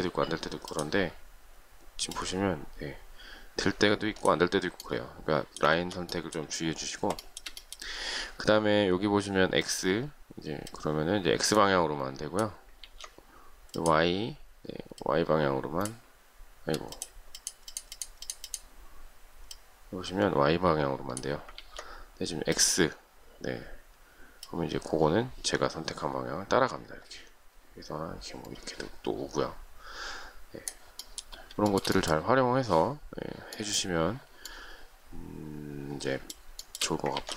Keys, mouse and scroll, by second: 5.6 ctrl+z, 7.0 shift+middle click, 12.7 ctrl+z, 21.4 ctrl+z, 31.5 shift+middle click, 36.5 shift+middle click, 37.0 ctrl+z.